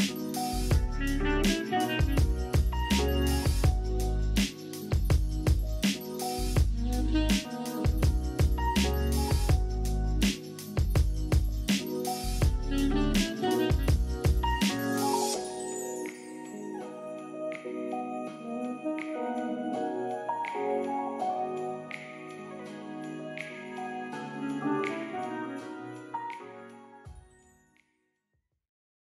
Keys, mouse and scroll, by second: 0.7 click, 2.2 alt+click, 2.6 right click, 2.8 right click, 3.4 middle click, 3.8 click, 5.4 alt+click, 6.0 click, 6.4 click, 6.8 middle click, 7.1 click, 7.8 right click, 8.1 typing, 9.8 click, 10.9 click, 12.6 click, 13.0 click, 14.8 click, 15.4 click, 17.7 click, 18.1 click, 18.5 click, 19.4 right click, 20.0 click, 21.0-21.4 typing, 22.0 click, 23.9 click.